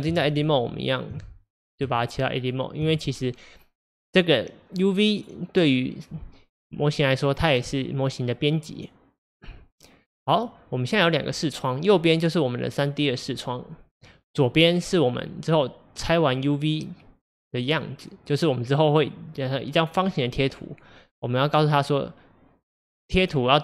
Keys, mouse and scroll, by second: 1.1 Tab, 2.8 Tab, 4.7 click, 7.2-23.6 middle drag.